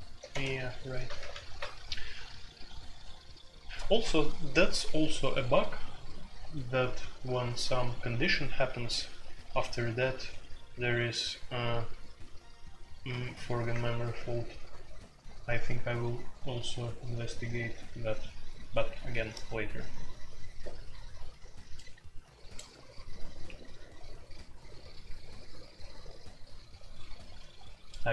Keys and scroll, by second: 0.0-0.8 typing, 1.1 alt+p, 13.5 Return.